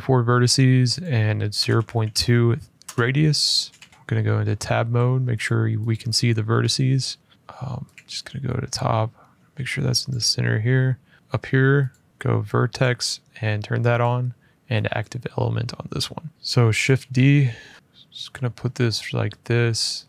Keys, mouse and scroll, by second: 0.8 click, 1.3-3.5 typing, 3.9 Tab, 3.9 shift+middle click, 4.3 middle click, 5.2 click, 5.7 click, 6.3 middle click, 6.4 middle click, 7.1 middle click, 7.2 scroll down 1, 7.3 scroll, 7.3 f, 7.3-7.7 `, 7.7 click, 9.8 shift+click, 11.1 shift+scroll, 11.6 click, 12.1 click, 12.5 click, 13.7 click, 14.8 click, 16.3 n, 16.8 d, 17.7 shift+Escape, 18.1 shift+click.